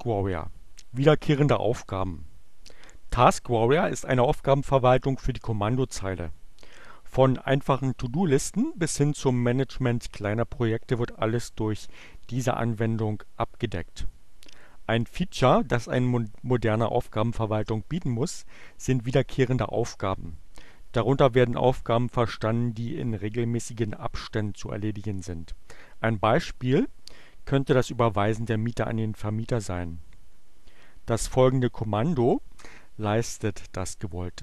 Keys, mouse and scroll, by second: 32.5-33.4 typing.